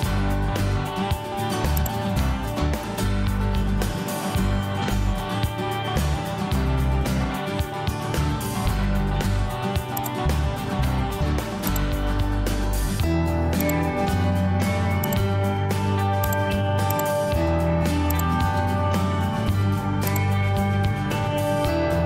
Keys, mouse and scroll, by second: 0.3 Delete, 12.5 Escape.